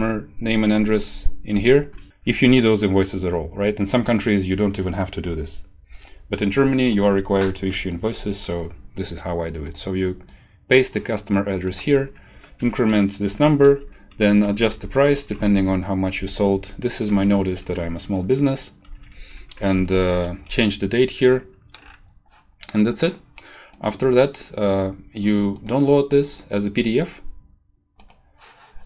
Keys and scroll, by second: 12.5 BackSpace, 12.6 3, 13.3 Down, 14.5 Left, 15.3 Left, 16.2 Down, 17.2 shift+Home, 18.8 Down, 19.8 ctrl+Left, 20.5 Left.